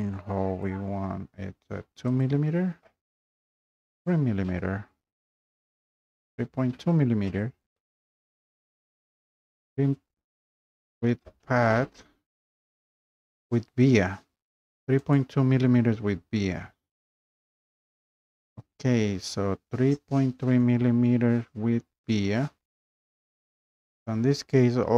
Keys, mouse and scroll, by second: 0.7 click, 2.4 click, 4.2 click, 8.4 click, 15.1 click, 16.2-20.2 drag.